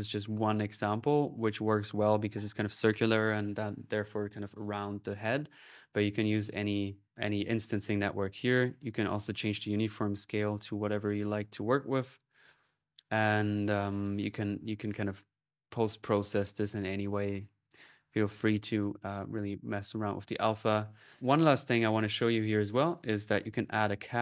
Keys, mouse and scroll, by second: 0.2 right click, 0.5-1.8 drag, 5.7 click, 7.0 click, 7.9 click, 8.6 click, 8.7-11.6 drag, 11.6 ctrl+z, 11.9 ctrl+click, 12.4 ctrl+middle click, 13.1 ctrl+click, 13.7 middle click, 16.2-18.1 drag, 19.5 click, 20.3 middle click, 20.9-22.4 drag, 22.4 right click, 22.8 click, 23.5-24.2 typing.